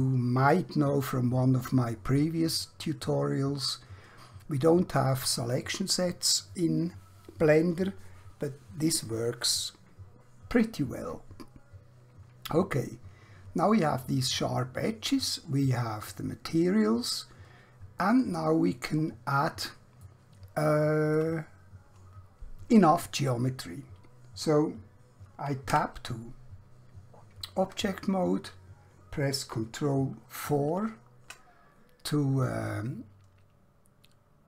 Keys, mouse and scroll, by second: 14.3 middle click, 18.6 scroll down 1, 19.1 scroll up 1, 20.1 shift+middle click, 25.7 Tab, 29.7 ctrl+Num_Lock, 30.5 ctrl+4.